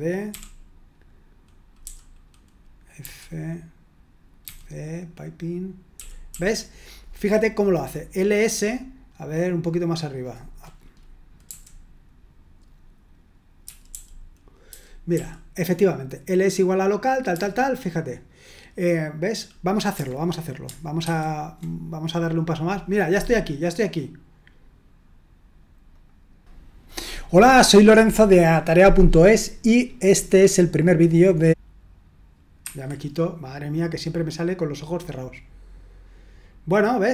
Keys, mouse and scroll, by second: 0.0-0.3 typing, 1.8 typing, 3.0 typing, 4.4 typing, 5.9-6.3 typing, 8.7-9.5 scroll up 1, 9.5-10.6 scroll up 1, 10.6-11.4 scroll up 1, 11.4 u, 13.6-15.1 typing, 17.3 typing, 21.1 super+1, 25.9 click, 31.3 click, 32.6 Escape, 36.0-36.9 scroll down 1, 36.9-37.1 scroll down 1.